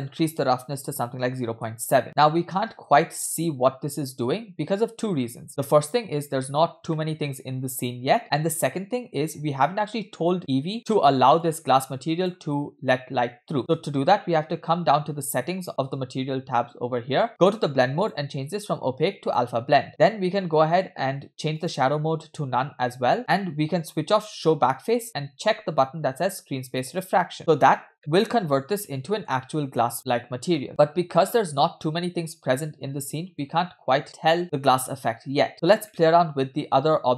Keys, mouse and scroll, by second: 2.6-5.3 middle drag, 5.7-6.3 scroll up 1, 6.4 shift+scroll up 1, 6.5 shift+middle click, 7.0-9.9 middle drag, 11.4 click, 14.5-16.2 scroll down 2, 16.2 scroll down 3, 16.3-17.2 scroll up 6, 17.2-18.0 scroll down 1, 18.0 scroll down 1, 18.0-19.6 drag, 22.6 click, 27.1 click, 28.0-29.3 middle drag, 29.5-30.2 scroll up 2, 30.3-30.6 scroll down 2, 30.6-33.5 middle drag, 33.6-34.0 scroll up 3, 34.2 scroll down 4, 34.4-35.0 scroll up 2, 35.0-35.9 scroll down 2, 35.9-37.1 middle drag.